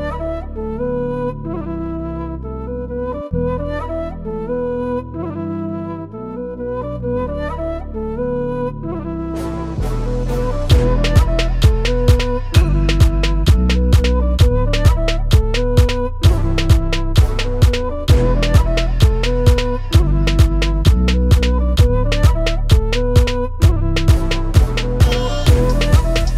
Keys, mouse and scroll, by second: 0.0-1.3 typing, 0.0 right click, 0.0 click, 0.2 click, 0.2 middle click, 0.4 click, 0.6 middle click, 0.7 click, 1.0 middle click, 1.3 click, 1.4 middle click, 1.4 click, 1.6 click, 2.0 click, 2.3 click, 2.7 click, 2.8 scroll down 2, 3.0 click, 3.2 click, 3.9 click, 4.2 click, 4.5 click, 5.2 click, 5.6 ctrl+e, 5.8 click, 6.0 click, 6.8 click, 7.1 click, 7.4 click, 7.6 click, 7.8 click, 8.1 right click, 8.4 click, 9.0 click, 9.1 click, 9.3 ctrl+r, 9.3 click, 9.5 click, 9.8 click, 10.1 click, 10.4 click, 10.5 click, 10.9 shift+click, 11.1 click, 11.4 shift+click, 11.7 click, 12.2 click, 12.5 click, 12.7 click, 12.8 shift+click, 13.8 click, 14.4 click, 14.6 shift+middle click, 14.9 click, 15.3 alt+click, 15.7 ctrl+e, 15.9 click, 16.1 click, 16.3 click, 16.3 ctrl+r, 16.5 click, 16.7 middle click, 17.0 click, 17.2 shift+middle click, 17.3 ctrl+middle click, 17.5 click, 17.6 click, 17.9 shift+middle click, 18.1 click, 18.3 click, 18.3 middle click, 18.8 click, 19.0 scroll down 3, 19.1 click, 19.5 middle click, 20.0 click, 20.4 alt+click, 20.8 right click, 21.2 click, 21.3 l, 21.8 click, 22.0 middle click, 22.2 click, 22.4 middle click, 22.7 ctrl+right click, 22.9 middle click, 22.9 click, 23.1 middle click, 23.2 middle click, 23.4 ctrl+right click, 23.6 click, 23.8 shift+middle click, 24.0 ctrl+right click, 24.4 shift+click, 24.4 f, 24.7 click, 24.7 click, 25.0 shift+click, 25.0 f, 25.0 click, 25.2 f, 25.2 click, 25.6 click, 25.6 middle click, 25.7 click, 25.8 middle click, 26.0 click, 26.2 shift+middle click, 26.3 click.